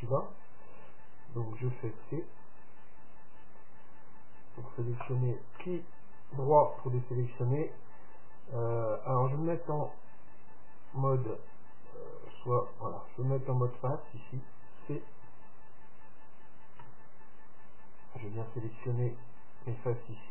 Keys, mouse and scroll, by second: 2.1 c, 5.8-7.6 middle drag, 9.9-11.6 drag, 12.4-15.6 drag, 17.0 c.